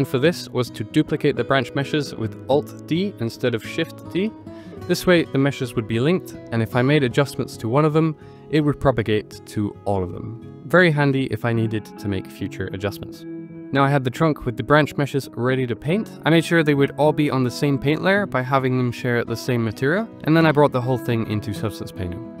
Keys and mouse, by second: 0.6 shift+d, 1.0 x, 1.8 click, 2.2 Tab, 2.6 1, 2.8 click, 3.3 g, 4.6 click, 5.0 Tab, 5.4 click, 5.7 x, 6.4 click, 6.8 alt+d, 7.5 g, 7.6 x, 8.5 click, 8.9 Tab, 9.2 1, 9.3 click, 9.9 g, 10.1 z, 13.6 Tab, 13.9-22.4 drag.